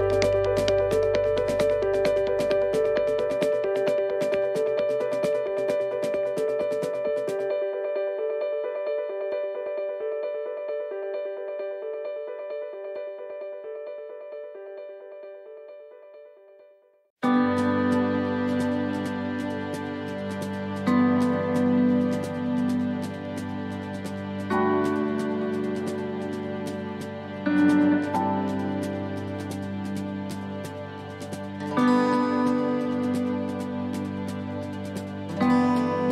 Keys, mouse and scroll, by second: 0.4 click, 3.4 right click, 4.3 click, 6.3 click, 8.0 right click, 8.9 click, 11.4 click, 13.1 right click, 14.0 click, 16.1 click, 18.2 right click, 19.1 click, 22.6 click, 25.3 right click, 26.3 click, 28.9 shift+d, 30.2 click, 34.9 shift+middle click.